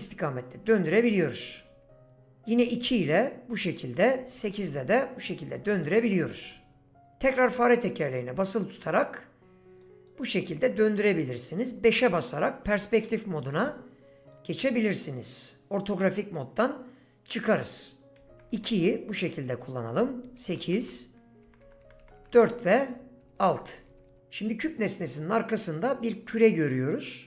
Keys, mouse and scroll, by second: 0.0-2.9 typing, 4.2-6.4 typing, 11.6 KP_5, 18.2 KP_2, 18.2 KP_2, 18.5 KP_2, 18.7 KP_2, 20.0-24.1 typing.